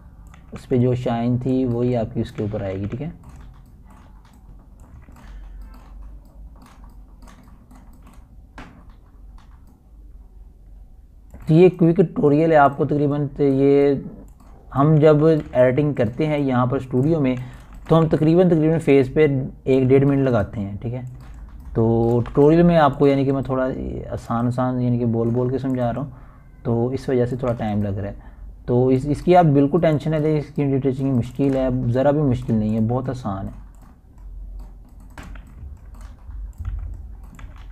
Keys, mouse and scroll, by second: 0.8 scroll down 1, 1.0-1.8 typing, 1.9-3.2 drag, 3.2 ], 3.5 click, 4.2 ], 4.5 click, 5.2-5.6 typing, 6.0-7.5 drag, 7.5 [, 7.8-14.0 drag, 14.0 [, 14.2 click, 15.4 [, 15.8-17.5 drag, 17.5-18.4 typing, 18.6-20.0 drag, 20.0-21.3 typing, 21.5 click, 22.6 typing, 23.0 click, 23.8 ], 24.0 click, 25.0 [, 25.1 click, 25.1 click, 25.7 ], 25.9 ], 25.9 click, 27.0 [, 27.2-28.5 drag, 28.5 [, 28.6-30.2 drag, 30.2 ], 30.4-31.7 drag, 31.7 [, 32.0-35.4 drag, 35.4-37.1 typing, 35.6-37.7 drag.